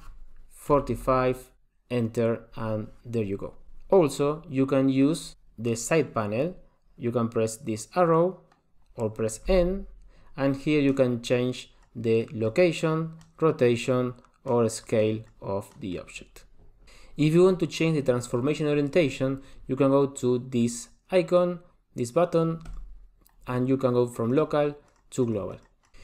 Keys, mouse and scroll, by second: 9.7 n, 11.1 click, 12.4 click, 13.4 click, 14.6 click, 15.2 click, 15.9 click, 22.6 click, 25.9 shift+middle click.